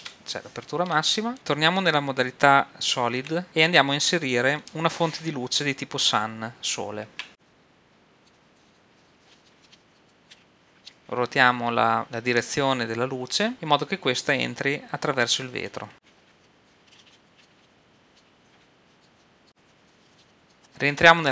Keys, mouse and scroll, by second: 3.4 shift+z, 7.1 shift+a, 8.5 click, 9.1 KP_7, 9.3 shift+click, 9.6 shift+KP_5, 10.1 click, 10.4 KP_1, 11.0 r, 15.9-18.5 typing, 16.7 click, 17.3 middle click, 17.7 middle click, 18.9 click, 19.8 middle click, 20.3 click, 20.6-21.3 middle drag.